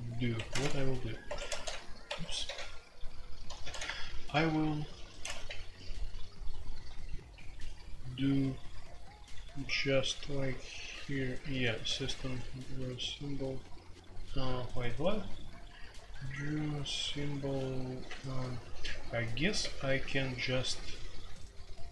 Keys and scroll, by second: 0.3 Escape, 0.6 ctrl+a, 1.2 Escape, 1.5-12.2 typing, 2.0 Escape, 18.0-19.6 typing.